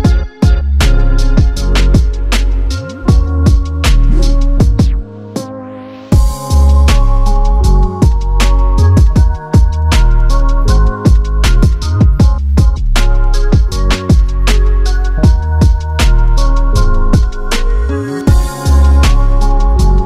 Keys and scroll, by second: 0.0-0.6 typing, 6.3 ctrl+d, 7.5 g, 9.2-10.7 typing, 15.8 super+z, 16.0-16.7 typing, 19.9-20.0 typing.